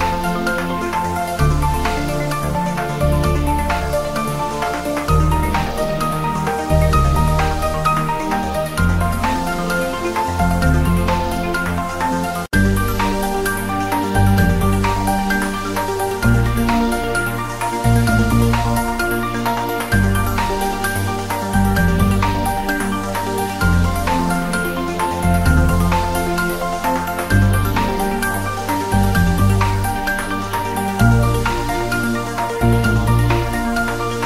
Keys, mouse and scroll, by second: 1.3 scroll up 1, 2.1 drag, 3.3-3.6 scroll down 1, 4.0-4.6 drag, 12.4 click, 13.1 Return, 14.2-14.5 scroll down 1, 15.1-15.5 click, 15.5-15.8 scroll up 1, 16.0 click, 16.6-17.2 scroll up 1, 17.2 click, 19.1 click, 20.2 click, 22.7 click, 23.8 click, 25.5 click, 26.9-27.3 scroll down 1, 27.5-27.9 scroll up 1, 28.4-30.2 drag, 31.4-31.8 drag, 32.5-33.4 scroll down 2, 33.5-34.2 drag.